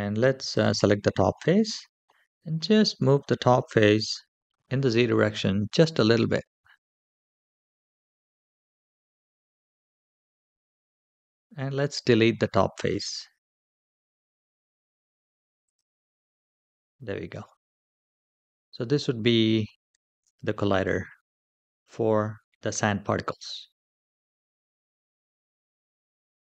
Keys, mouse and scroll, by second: 0.1 click, 1.0 middle click, 2.1-2.6 scroll up 2, 2.6 middle click, 5.6 g, 12.0 x, 15.4 typing, 16.3-17.6 middle drag, 18.3 scroll down 2, 19.3 shift+middle click, 25.5 Tab.